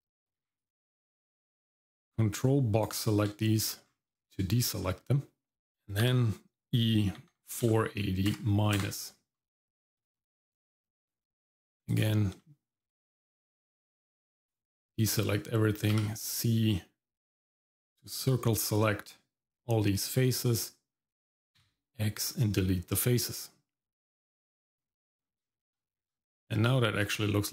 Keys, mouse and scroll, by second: 0.6 ctrl+click, 1.1-2.9 ctrl+drag, 3.8-4.2 scroll down 1, 4.3 shift+middle click, 4.8 middle click, 6.1 e, 9.7 shift+middle click, 10.1-10.8 scroll up 2, 11.9 click, 12.4 shift+middle click, 13.0 middle click, 14.5 click, 15.9 c, 21.6 x, 24.7 click, 25.2 scroll down 1, 25.5 shift+middle click, 26.0 Tab, 26.8 shift+middle click, 27.1 middle click.